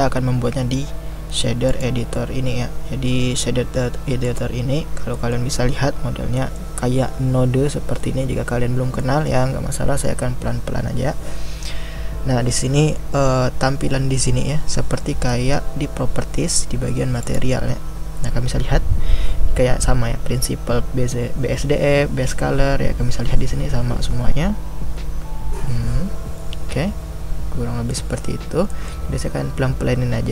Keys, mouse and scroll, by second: 19.3-22.4 scroll down 3.